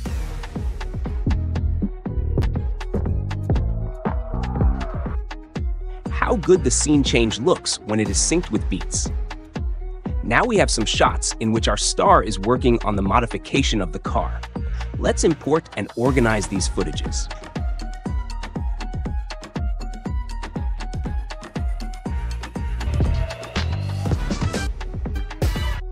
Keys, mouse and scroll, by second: 0.4 click, 0.8 click, 1.2 space, 5.1 space, 8.1-9.1 drag, 10.3-11.5 drag, 15.2-16.2 drag, 17.3 ctrl+b, 17.5 Delete, 17.9 drag, 18.2 click, 18.3 space, 18.8 space, 19.1 ctrl+z, 19.4 click, 19.8 click, 19.9 space, 20.2 space, 20.4 click, 20.9 click, 21.2 ctrl+b, 21.3 Delete, 21.7 click, 22.3 click, 22.7 space, 24.6 space, 25.1 space, 25.7 space.